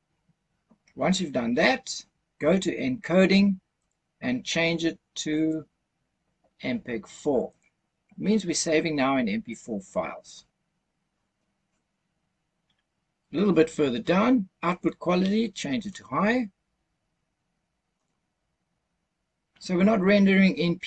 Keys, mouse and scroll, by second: 1.5-3.7 scroll down 2, 3.7 click, 5.2-7.6 drag, 9.4-10.2 scroll down 1, 10.2-11.1 scroll down 2, 11.1-11.5 scroll down 2, 15.7-18.0 drag.